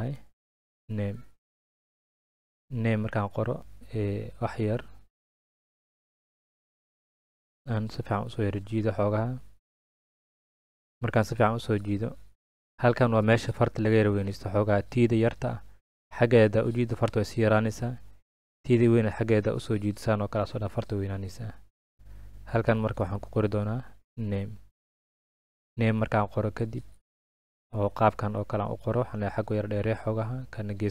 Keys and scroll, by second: 0.0-1.8 typing, 4.0 Escape, 6.3 ctrl+z, 22.5 BackSpace, 23.6-24.6 typing.